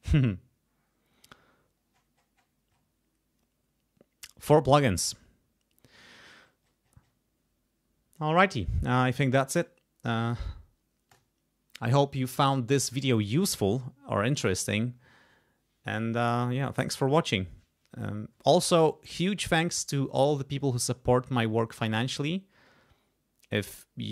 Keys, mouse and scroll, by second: 1.9-2.7 scroll down 2, 2.7-5.9 scroll up 2, 5.9-8.7 scroll up 1, 11.1 click, 13.0 click.